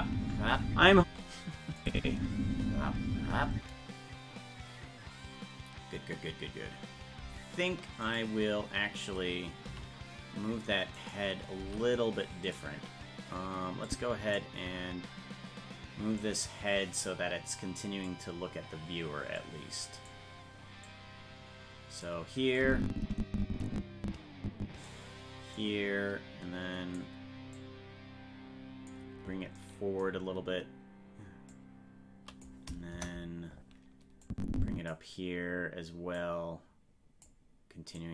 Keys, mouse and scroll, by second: 1.8 click, 2.0 space, 8.1 right click, 9.7 g, 13.9 click, 16.2-18.1 drag, 19.4 click, 20.8-22.0 drag, 22.6-24.9 drag, 25.5-27.0 drag, 27.5-28.9 drag, 31.5 click, 32.9 KP_0, 34.2 click, 36.2-37.3 drag, 38.0-38.1 drag.